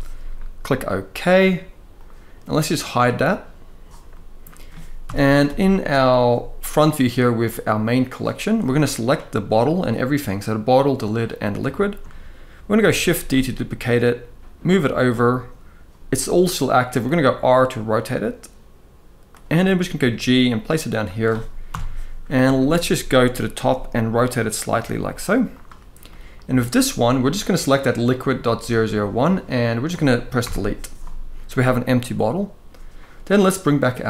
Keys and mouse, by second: 1.7 drag, 2.9 click, 3.8 middle drag, 4.7 KP_1, 5.3 shift+middle drag, 7.0 click, 8.4 click, 11.4-11.7 shift+middle drag, 13.0 shift+d, 16.6 r, 19.6 g, 21.3 KP_7, 22.2 shift+middle drag, 23.2 r, 24.8 g, 25.7-26.3 middle drag, 27.7 click, 30.1 Delete.